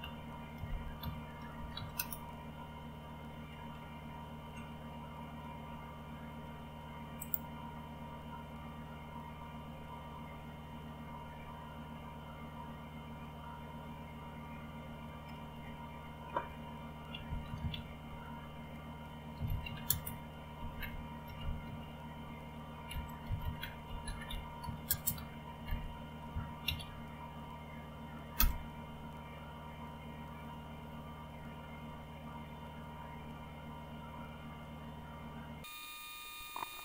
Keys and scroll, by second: 0.0-2.4 typing, 3.5-4.3 typing, 15.2-27.3 typing, 28.4 Return.